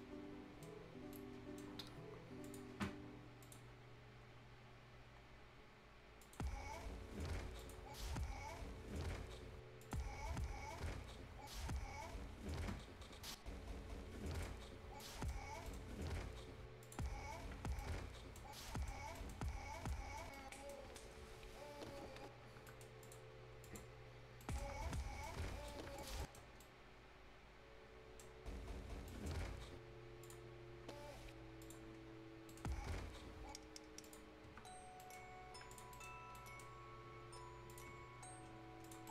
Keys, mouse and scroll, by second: 0.8 scroll up 1, 1.1-2.4 right drag, 2.4 click, 3.7 scroll up 1, 5.4 scroll down 1, 5.6-6.2 scroll up 1, 6.2 click, 6.5 scroll down 1, 6.8-7.3 scroll up 1, 7.5 click, 14.3 click, 14.7 scroll down 1, 14.9 right click, 15.4 scroll up 1, 15.6 right click, 16.8 click, 17.0 scroll down 1, 17.7 right click, 18.4 scroll up 1, 18.6 right click, 19.0 scroll up 1, 19.1 right click, 19.3 scroll down 1, 19.8 Caps_Lock, 20.3 right click, 20.7 scroll down 1, 21.0 scroll up 1, 21.9 Tab, 22.6 right click, 23.0 click, 23.9 scroll up 1, 24.3 right click, 24.6 Tab, 25.0 scroll down 1, 25.2 right click, 25.9 click, 26.1 right click, 26.3 scroll down 1, 26.5-28.3 right drag, 28.3 scroll up 1, 29.0 right click, 29.5-30.2 scroll up 1, 30.2 click, 32.0 scroll up 1, 32.4 right click, 34.0 click, 34.3 scroll down 1, 34.4 Tab, 34.9 right click, 35.1 scroll down 1, 35.7 click, 35.9 right click, 36.0 scroll down 1, 36.3 right click, 36.6-37.6 scroll up 1, 37.6 click, 37.9 Tab, 38.5 scroll down 1, 38.8 click, 39.0 right click.